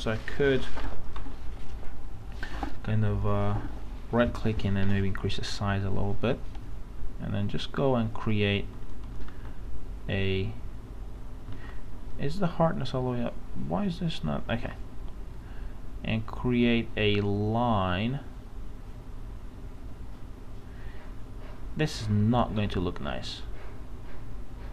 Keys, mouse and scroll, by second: 1.2 ctrl+z, 3.2 right click, 5.2-7.1 drag, 9.3 ctrl+z, 10.1-11.5 drag, 12.1 right click, 13.2 click, 14.5 ctrl+z, 15.2-24.7 drag.